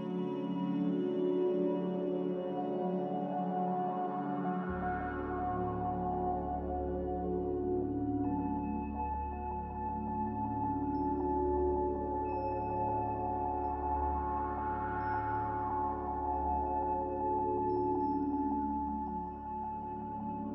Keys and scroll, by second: 8.2 g, 10.4 typing, 12.3 Return, 18.3 a.